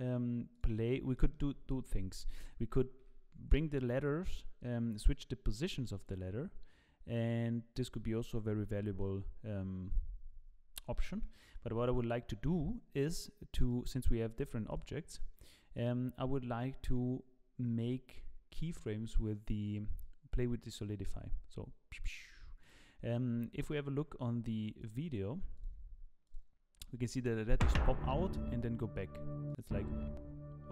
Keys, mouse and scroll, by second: 0.5 click, 1.1 middle click, 3.0 g, 9.0 middle click, 11.2 middle click, 13.6 click, 14.4 click, 16.3 click, 20.0 click.